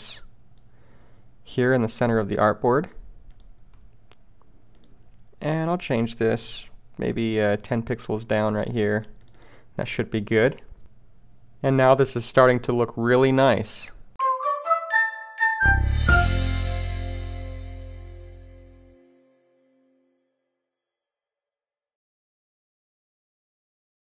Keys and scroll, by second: 7.1 shift+Down.